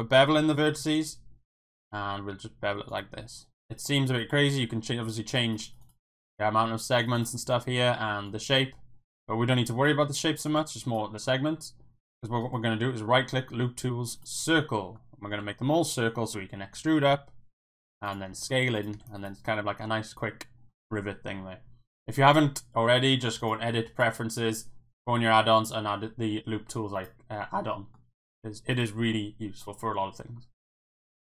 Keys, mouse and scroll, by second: 2.9 click, 5.3 click, 5.4 click, 5.6 click, 5.8 click, 7.0 click, 7.1 click, 8.2-9.8 drag, 10.9 click, 12.4-14.2 right drag, 15.0 click, 16.2 e, 17.0 z, 17.2 z, 18.0 click, 18.3 s, 18.7 click, 18.9 Tab, 19.2 click, 19.4-19.8 middle drag, 19.9-20.7 middle drag, 23.5-24.1 drag, 27.7 middle drag, 29.1-30.0 middle drag.